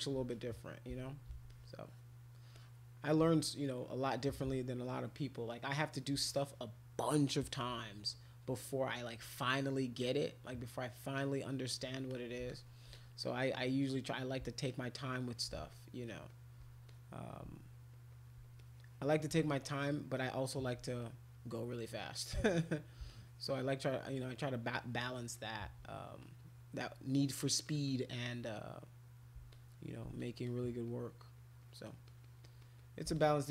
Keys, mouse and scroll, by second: 0.3 alt+click, 0.5 alt+click, 1.5 click, 2.6 click, 3.6 alt+click, 3.8 alt+click, 4.1 alt+click, 4.2 alt+click, 4.5-5.9 shift+drag, 6.2 click, 10.0 click, 11.2 click, 12.1 click, 12.5 alt+click, 12.9 click, 14.7 shift+click, 15.7 alt+click, 16.1 alt+click, 16.3 alt+click, 16.5 alt+click, 16.9 click, 17.8 alt+click, 17.9 alt+click, 18.1 alt+click, 18.6 click, 19.6 alt+click, 20.0 alt+click, 20.2 alt+click, 20.4 alt+click, 21.0 click, 22.2 click, 22.4 click, 22.7 click, 23.1-24.4 shift+drag, 24.6 shift+click, 25.2 shift+click, 25.3 shift+click, 25.5 shift+click, 25.8 click, 26.2 click, 26.4 click, 26.8 click, 27.2 click, 27.4 click, 27.6 click, 27.9 click, 28.3 click, 29.5 shift+click, 30.3 alt+click, 30.4 alt+click, 30.7 alt+click, 30.9 alt+click, 31.4 alt+click, 31.6 alt+click, 31.8 alt+click, 32.1 alt+click, 32.2 alt+click, 32.4 alt+click, 32.6 alt+click, 32.8 alt+click, 33.1 shift+click.